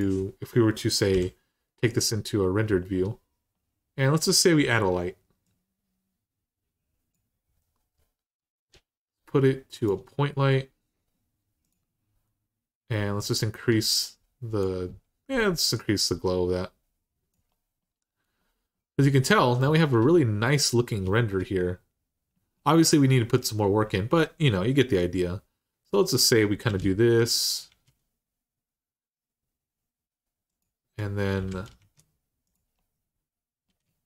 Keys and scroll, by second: 0.9 h, 26.5 d, 27.5 z, 31.2-31.6 typing, 33.9-34.0 typing.